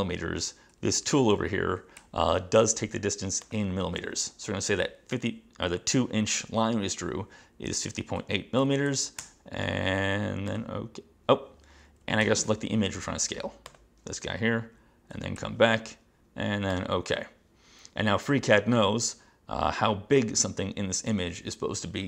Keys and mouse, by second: 3.5 click, 7.5-9.1 typing, 9.3 Return, 10.6 click, 12.3 j, 13.8 click, 15.5 j, 16.8 click.